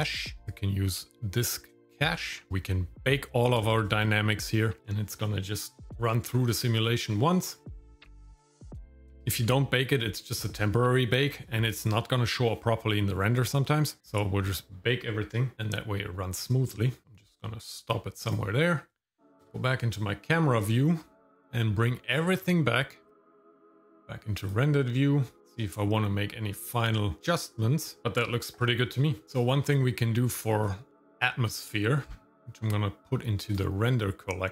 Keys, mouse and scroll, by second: 0.4 scroll down 1, 0.7 click, 4.8-14.0 drag, 15.5 click, 17.0 click, 17.7 click, 19.4 KP_0, 22.1-22.5 scroll down 3, 23.3 click, 23.4 scroll up 4, 23.6 click, 24.8 click, 30.3-30.9 scroll up 4, 32.0-33.5 scroll down 2, 33.5 click.